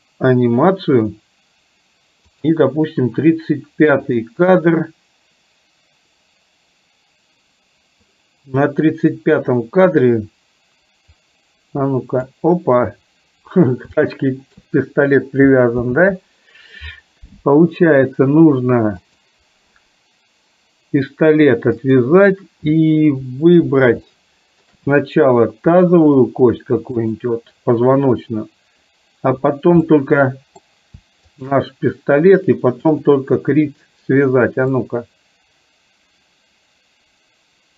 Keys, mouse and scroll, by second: 2.4 click, 11.3-12.5 drag, 14.1 shift+middle click, 15.9 ctrl+z, 19.1 click, 21.8 click, 24.1 shift+middle click, 27.1 click, 29.9 middle click, 31.4 shift+click, 32.9 click, 35.0-37.7 drag.